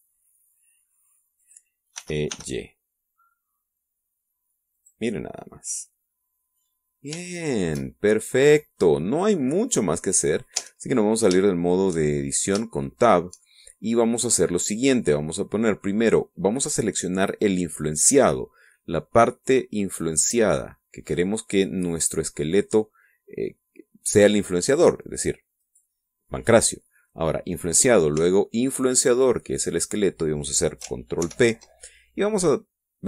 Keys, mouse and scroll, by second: 0.1 e, 0.5 y, 2.5 click, 3.0 e, 3.3 y, 5.8 click, 6.3 scroll down 1, 6.5 middle click, 7.3 click, 7.4 middle click, 7.9 scroll down 1, 8.3 shift+click, 8.8 shift+middle click, 9.4 shift+middle click, 11.6 Tab, 12.5 shift+middle click, 13.3-13.7 shift+scroll up 3, 13.9 shift+click, 15.3 scroll down 1, 18.1 click, 26.7 right click, 30.1 shift+right click, 32.3 ctrl+shift+p.